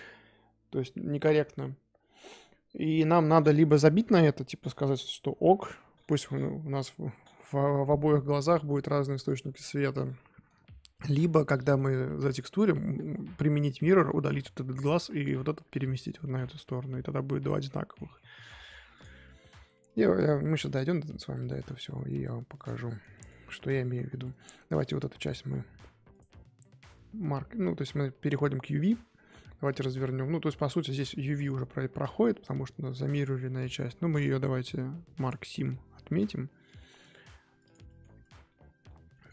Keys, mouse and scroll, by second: 9.2 click, 9.6-10.0 scroll down 1, 10.0-11.1 middle drag, 11.1 scroll up 1, 11.4-16.6 middle drag, 16.6 scroll down 1, 16.8-18.9 middle drag, 18.9 click, 19.7-20.1 middle drag, 20.1 click, 20.8-22.5 middle drag, 22.5 click, 23.1 middle click, 23.5 Tab, 23.8 Tab, 24.1 2, 24.7 alt+click, 25.1 middle click, 26.1-27.7 right drag, 27.7 Tab, 27.9-29.9 middle drag, 29.9 Tab, 31.0-33.6 middle drag, 33.6-35.7 right drag, 35.7-36.9 middle drag, 36.9-37.4 scroll up 2, 37.4 Tab, 37.6 click, 37.8 middle click, 38.2 Tab, 38.4-39.3 middle drag.